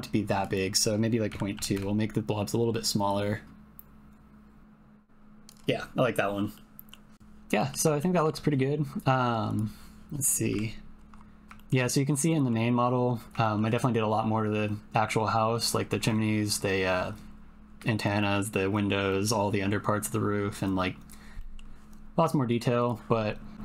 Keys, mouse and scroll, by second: 0.5-1.8 drag, 3.4-5.5 drag, 6.5 click, 7.6 click, 8.0 shift+middle click, 9.5 click, 10.5 KP_Decimal, 11.5 shift+middle click, 12.3 middle click, 13.4 shift+middle click, 13.5 shift+click, 18.2 click, 19.0 click, 21.4 click.